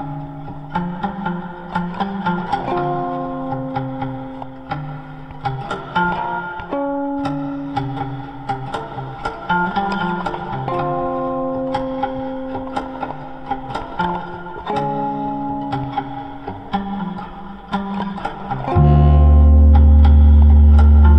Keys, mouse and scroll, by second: 0.9-4.8 drag, 15.7 click.